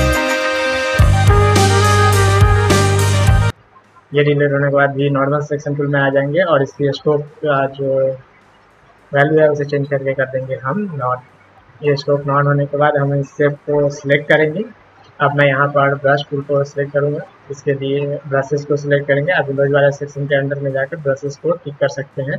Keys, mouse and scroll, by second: 0.6-1.6 alt+drag, 1.8 alt+click, 2.5-3.0 alt+drag, 3.1-3.5 alt+drag, 4.6 v, 6.5 click, 9.2 click, 11.1 click, 11.9 click, 12.9-14.6 drag, 17.5 click, 19.8 click.